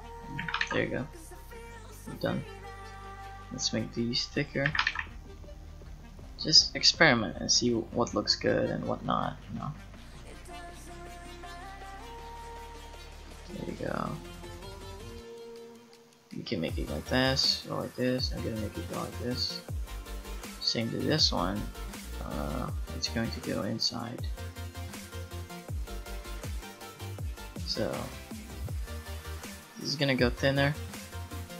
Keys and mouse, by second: 0.4 a, 0.6 ctrl+s, 3.7 middle click, 4.7 a, 4.9 ctrl+s, 5.1-6.1 drag, 6.1 middle click, 12.0-15.1 middle drag, 19.0-20.3 drag, 24.3-27.3 right drag, 29.9-30.9 middle drag.